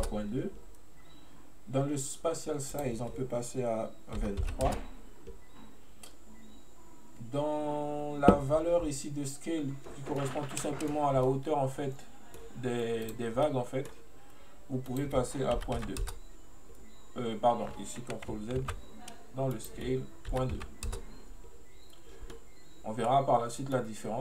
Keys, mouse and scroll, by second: 2.9-5.8 drag, 10.2-13.1 middle drag, 13.1 click, 13.5-14.9 middle drag, 14.9-18.0 drag, 19.6-22.4 drag, 22.4-24.2 middle drag.